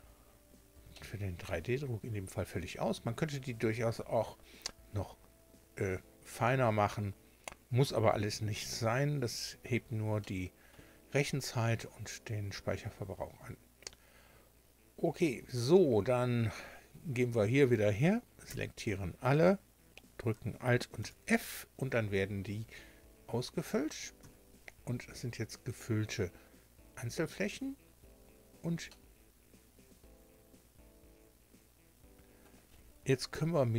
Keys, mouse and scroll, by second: 0.2 scroll up 2, 0.9 shift+middle click, 0.9 shift+scroll down 2, 10.2 shift+middle click, 18.5 a, 21.0 alt+f, 24.2 Tab, 28.9-32.6 drag, 33.3 KP_7.